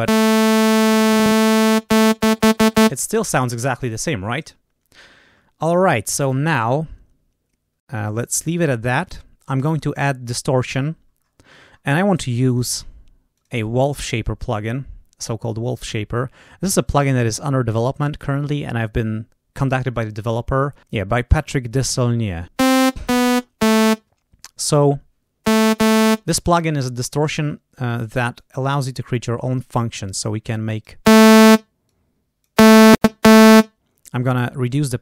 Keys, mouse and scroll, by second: 0.4-1.8 drag, 8.8 click, 9.6 right click, 11.1-11.8 scroll down 4, 13.3 click, 17.0-18.4 drag, 28.3-29.6 drag, 30.0 click, 31.8 click, 34.3-35.0 drag.